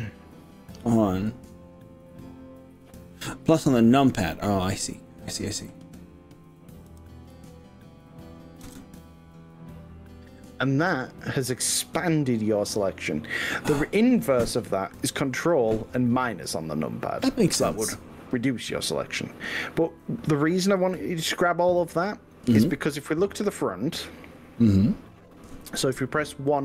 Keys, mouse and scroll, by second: 4.0-4.8 scroll up 1, 5.1 scroll down 1, 5.8 scroll up 1, 7.0 KP_3, 8.7 ctrl+KP_Add, 25.8 KP_1.